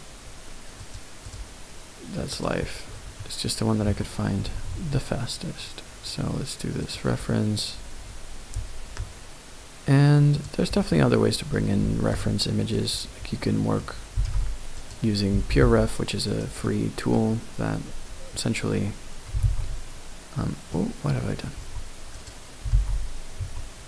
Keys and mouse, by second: 3.2 middle click, 3.9 Tab, 4.7 shift+a, 14.1 g, 14.2 z, 14.8 click, 15.3 g, 15.6 r, 16.3 right click, 16.6 middle click, 20.7 middle click, 21.5 Tab, 22.2 click, 23.4 Tab.